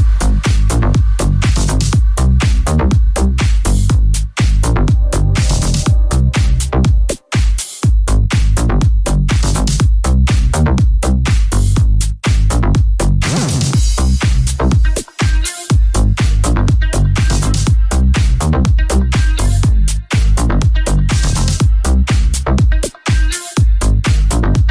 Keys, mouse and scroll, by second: 0.7 right click, 3.0 g, 3.3 right click, 3.4 shift+middle click, 3.9 shift+right click, 3.9 shift+middle click, 4.7 right click, 4.7-7.0 middle drag, 7.0 right click, 7.0 shift+middle click, 7.1 g, 7.4 shift+right click, 7.5-8.5 shift+middle drag, 8.4 j, 8.5 right click, 8.6-10.8 middle drag, 9.0 g, 10.8 right click, 10.8 g, 10.9 middle click, 11.4 right click, 11.4-17.9 middle drag, 12.3 g, 17.9 shift+right click, 18.0-19.5 shift+middle drag, 19.5 right click, 19.5 j, 19.6-21.2 middle drag, 20.1 g, 21.2 right click, 21.4-24.7 middle drag, 22.4 shift+click, 23.4 right click, 23.4 j, 24.3 g.